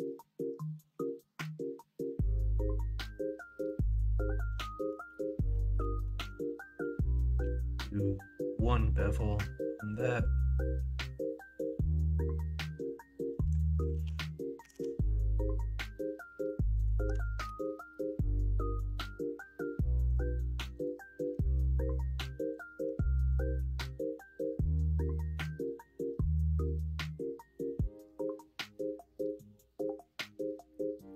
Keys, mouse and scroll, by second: 3.9-6.5 ctrl+z, 7.4 ctrl+b, 13.9 ctrl+z, 14.6 g, 17.4 ctrl+b.